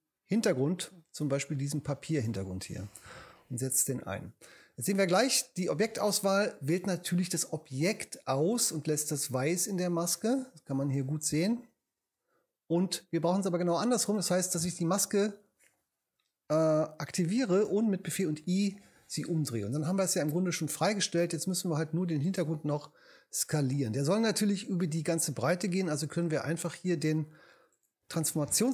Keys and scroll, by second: 18.0 super+i.